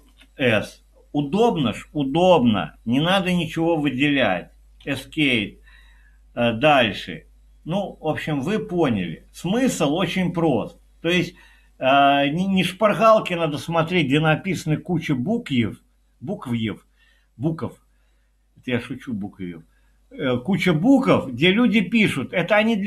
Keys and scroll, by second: 0.0 c, 4.8 Escape.